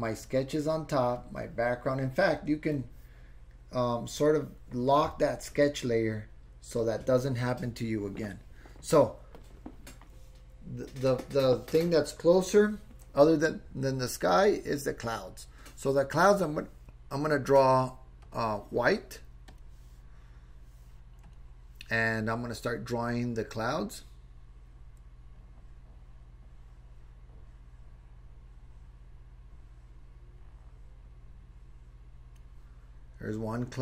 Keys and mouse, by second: 0.2 click, 1.2 click, 2.7 click, 18.2 click, 23.3 click, 24.0-32.4 drag.